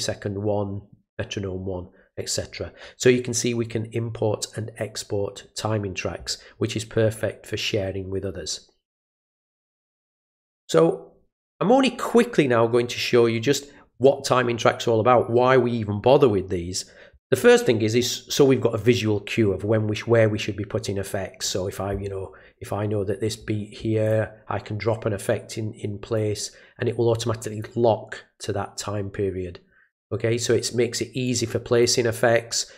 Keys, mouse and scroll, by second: 7.1-9.2 drag, 17.4 middle click, 17.4 scroll up 1, 19.9-21.4 drag, 24.0 click, 26.1-27.6 drag, 31.2 click.